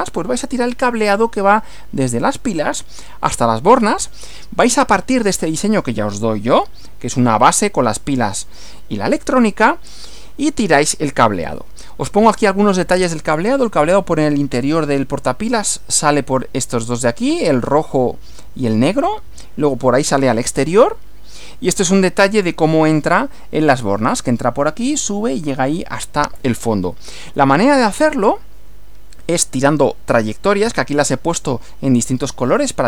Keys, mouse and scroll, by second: 4.0 Right, 11.5 Right, 20.7 Right, 27.3 Right.